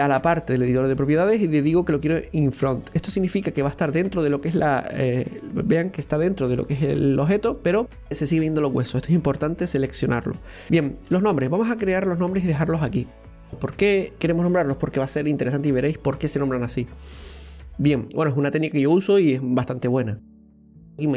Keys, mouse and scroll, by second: 2.7 click, 3.9-6.9 middle drag, 10.7-12.2 scroll down 1, 12.2 click, 13.5-14.0 scroll down 3, 18.5-20.2 scroll up 1, 20.3 right click.